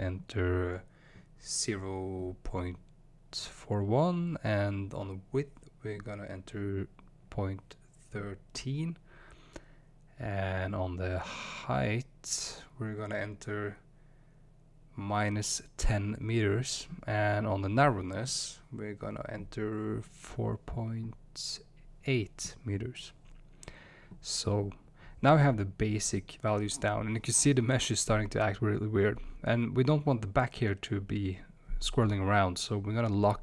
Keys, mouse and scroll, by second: 7.7-12.1 drag, 15.3-27.7 drag, 31.5 click, 32.6 Tab.